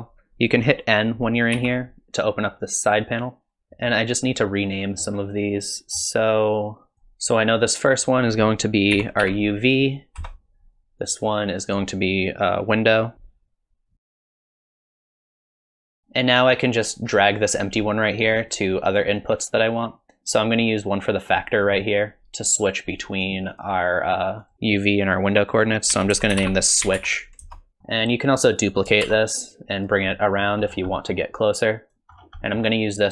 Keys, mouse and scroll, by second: 1.6 n.